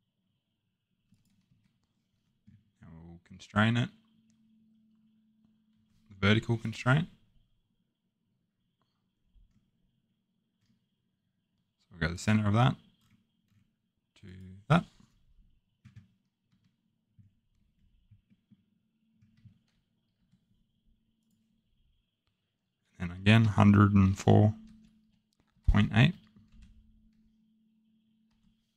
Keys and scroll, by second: 0.4 scroll down 1, 1.5 Escape, 16.5 Escape, 19.3 Escape, 23.4 1, 24.6-26.5 typing, 28.2 Return.